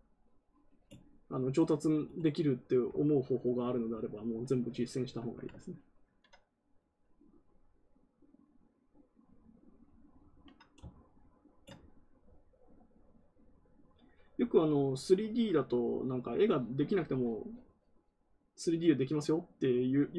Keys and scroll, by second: 5.9 ctrl+z.